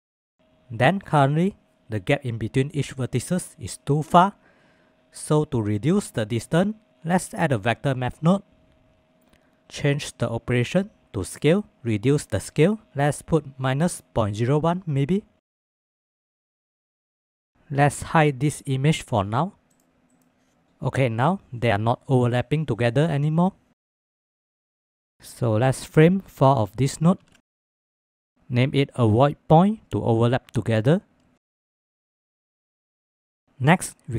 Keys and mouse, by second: 0.2-0.8 middle drag, 1.4 shift+middle drag, 2.1 middle click, 2.1 Tab, 5.8 shift+a, 9.0-11.2 drag, 12.3-15.0 drag, 15.7 shift+middle drag, 16.2 shift+middle click, 16.4-17.2 middle drag, 19.7 click, 20.1 click, 24.4 click, 24.6 shift+click, 24.9 g, 25.1 drag, 25.6-26.4 drag, 27.2 ctrl+j, 28.9 F2, 32.3 ctrl+s.